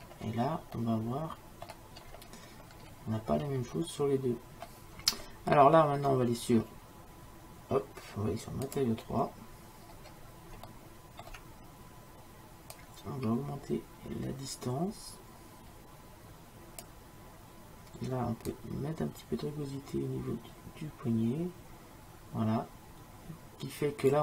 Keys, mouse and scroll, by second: 0.9-7.7 middle drag, 8.8-10.1 drag, 10.1 middle click, 10.5 click, 11.0-12.3 middle drag, 12.8-14.7 drag, 18.6-20.4 drag.